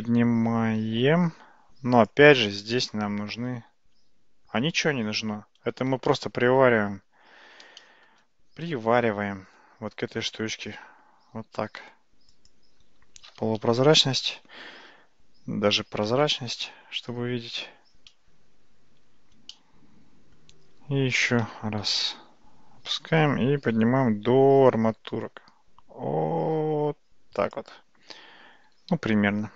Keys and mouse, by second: 6.1-6.7 shift+middle drag, 7.8 shift+middle click, 8.7 g, 13.3 alt+z, 16.4 shift+z, 19.6-20.4 shift+middle drag, 21.8 g, 28.7 Tab.